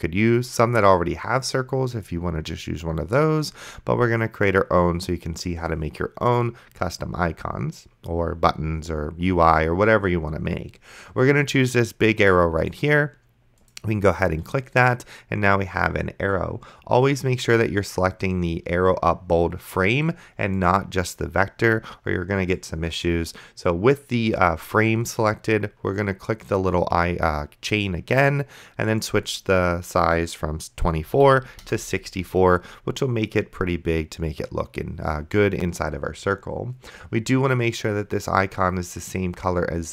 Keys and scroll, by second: 31.3 KP_4, 31.7 Return.